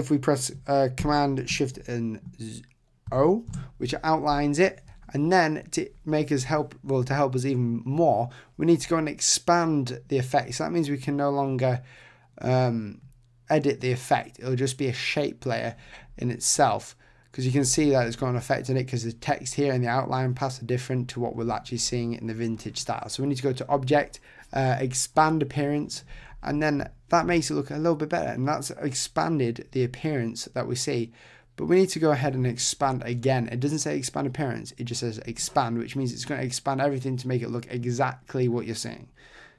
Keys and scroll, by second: 3.1 shift+super+o.